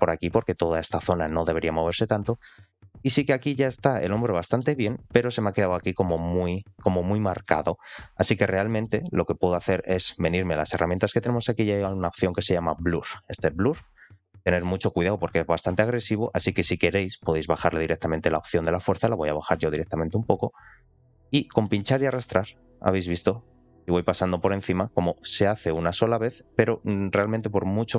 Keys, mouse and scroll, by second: 1.2 middle click, 1.8 middle click, 2.5 middle click, 3.1-3.9 scroll down 2, 3.5-4.5 middle drag, 4.8-5.2 scroll up 3, 5.2 middle click, 5.7-6.1 scroll up 2, 6.1 middle click, 6.8 alt+middle click, 6.8 scroll up 1, 8.2-8.6 scroll down 1, 8.6 middle click, 13.1 click, 18.4 click, 21.5 click, 25.0 click.